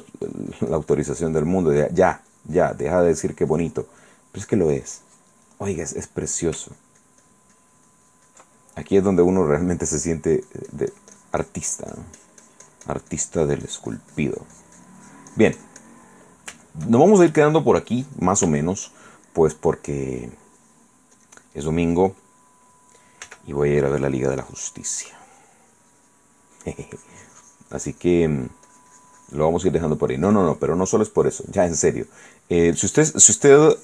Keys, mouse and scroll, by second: 0.5-1.8 drag, 1.8 middle click, 4.0 click, 4.2 middle click, 5.7 middle click, 6.2 middle click, 7.0 ctrl+click, 8.8-10.2 ctrl+middle drag, 10.5-16.2 drag, 16.3 middle click, 16.8 shift+middle click, 18.2 middle click, 19.7-20.8 shift+middle drag, 21.3 click, 22.3 click, 23.4 f, 23.8 click, 25.0-26.5 drag, 26.6-30.9 drag, 26.6 middle click, 31.3-32.7 drag, 32.7 middle click, 33.0-33.8 drag.